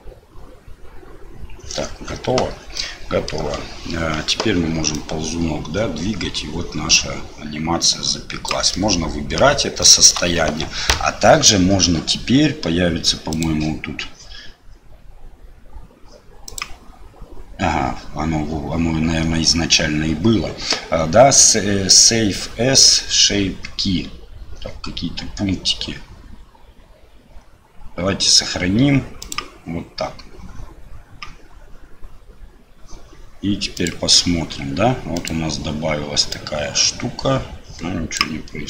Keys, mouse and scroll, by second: 2.7 middle click, 4.9-8.5 drag, 8.7 middle click, 9.8 shift+middle click, 16.5-29.4 drag, 35.2 click, 36.4-38.2 drag.